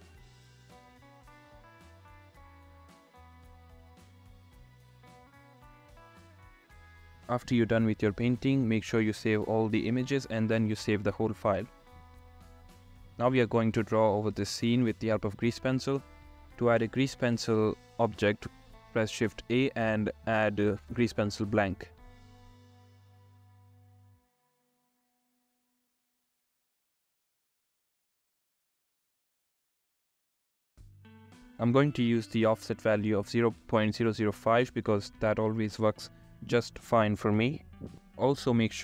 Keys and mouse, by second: 0.0-4.4 typing, 0.4 ctrl+z, 5.1 ctrl+z, 5.6 ctrl+z, 5.6 ], 6.0 ], 7.2 ], 13.3 shift+a, 27.1 click, 28.2 ctrl+z, 32.9-34.1 drag, 32.9 KP_0, 34.4 ctrl+z, 35.9 ], 36.0 ], 37.8 ctrl+z, 37.9 [.